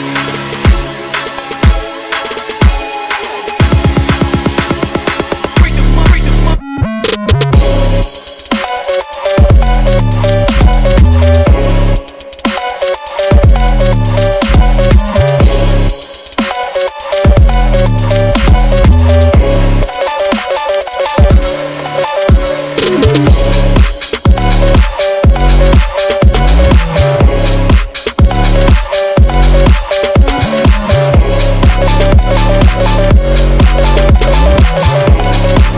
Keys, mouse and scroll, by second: 0.0-1.8 typing, 1.5 click, 2.3 click, 2.7 click, 3.0 e, 3.5 click, 4.1 e, 4.5 s, 4.9 ctrl+z, 5.2 click, 5.4 s, 7.0 click, 8.0 click, 10.1-11.4 drag, 11.8 ctrl+r, 12.5 ctrl+z, 15.1-15.5 ctrl+z, 15.5 click, 16.1-16.5 scroll up 2, 16.9 right click, 17.2 ctrl+z, 18.7 scroll down 4, 18.9 ctrl+z, 19.6 click, 19.8-20.4 scroll up 2, 20.4 click, 20.5 Tab, 20.6 click, 20.8 click, 21.7 click, 21.9 Tab, 22.0 click, 22.6 click, 23.0 shift+s, 23.1 Tab, 23.3 shift+a, 23.7 click, 24.2 click, 24.8 r, 25.6 click, 25.8 Tab, 26.1 e, 26.4 click, 27.0 click, 27.6 i, 28.0 click, 28.4-28.8 right drag, 28.9 click, 29.5 shift+click, 29.7 i, 30.0 e, 30.6 ctrl+z, 30.8 i, 31.4 e, 32.3 click, 33.1 click, 33.3 shift+click, 33.8-34.6 drag, 35.2 click.